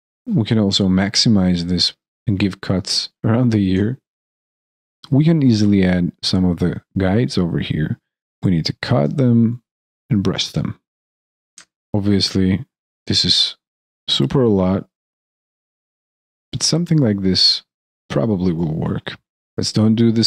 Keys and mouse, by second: 0.0 alt+click, 0.1 alt+middle click, 0.5 alt+click, 1.8 shift+right click, 2.2 alt+middle click, 2.4 alt+click, 2.5 alt+middle click, 2.6 alt+right click, 3.0 ctrl+click, 3.2 alt+click, 3.7 alt+click, 3.7 alt+right click, 3.8 alt+click, 3.9 alt+middle click, 3.9 alt+right click, 4.0 alt+middle click, 4.0 alt+click, 4.3 alt+right click, 4.5 ctrl+click, 5.2 alt+click, 5.3 ctrl+click, 5.6 alt+click, 5.9 alt+click, 7.2 alt+click, 7.5 alt+right click, 7.5 alt+click, 8.8 alt+right click, 8.8 alt+middle click, 9.3 alt+click, 10.2 alt+click, 10.9 alt+click, 16.1 alt+click, 17.0 alt+middle click, 17.5 alt+click, 18.1 alt+middle click, 18.4 alt+click, 18.9 alt+middle click, 19.3 alt+click.